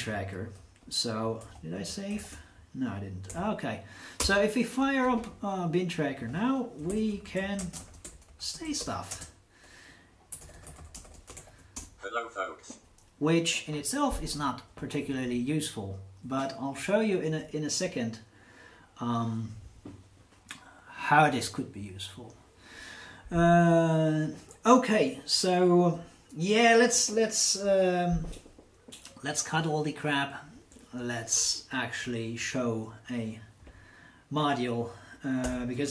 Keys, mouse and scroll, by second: 0.5 Up, 3.3 super+4, 4.1 Return, 6.1 click, 6.6-11.8 typing, 35.4 ctrl+n.